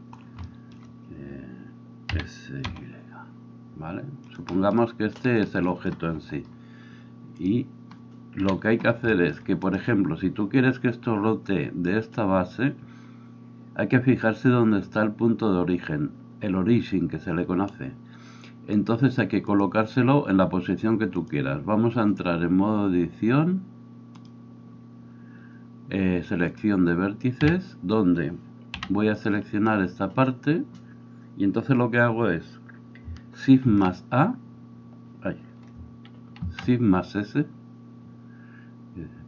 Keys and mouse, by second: 2.2 s, 8.5 KP_1, 9.7-11.5 right drag, 11.5-27.4 middle drag, 27.4-39.2 drag, 27.4 a, 28.8 b, 33.7 shift+a, 36.5 shift+s.